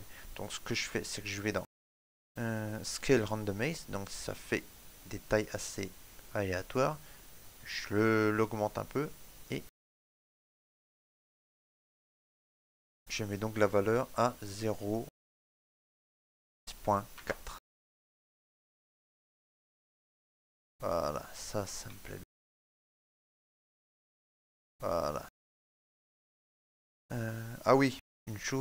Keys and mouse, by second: 0.2 middle click, 4.0 click, 10.0 shift+middle click, 10.6 middle click, 11.7 shift+middle click, 12.1 middle click, 14.3 click, 19.2 shift+middle click, 19.5 middle click, 21.8 ctrl+middle click, 23.6 right click, 24.2 shift+middle click, 24.9 ctrl+middle click.